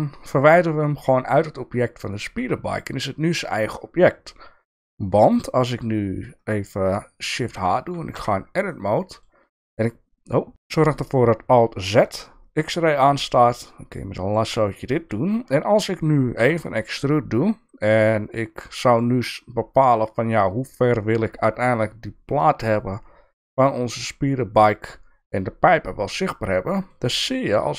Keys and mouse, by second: 2.4 Tab, 3.3 click, 7.4 shift+h, 8.2 Tab, 8.7 middle click, 9.7 click, 10.5 ctrl+z, 10.5 KP_1, 10.5 KP_3, 11.6 alt+z, 12.7-14.4 drag, 16.4 e, 26.3 middle click, 27.5 alt+z.